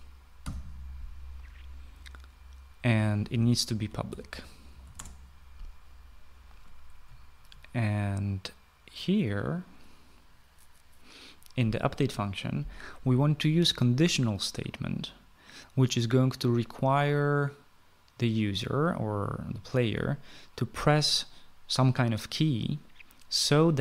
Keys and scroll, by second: 0.0-0.9 typing, 4.1-5.8 typing.